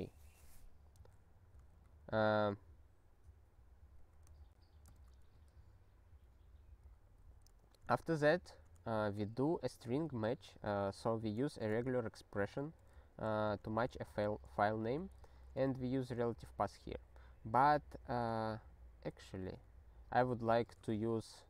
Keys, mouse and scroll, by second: 1.7 ctrl+n, 4.0 ctrl+a, 4.2 ctrl+e, 4.9 Return, 7.1 ctrl+n, 7.9 ctrl+p, 8.1 ctrl+a, 8.4 ctrl+k, 9.3 alt+f, 9.6 alt+f, 11.4 ctrl+f, 11.8 ctrl+alt+@, 12.5 ctrl+f, 13.2 ctrl+g, 13.9 alt+f, 14.0 alt+f, 14.4 alt+f, 15.6 alt+b, 19.4 alt+d, 20.3 alt+d, 20.6 f, 21.0 ctrl+s.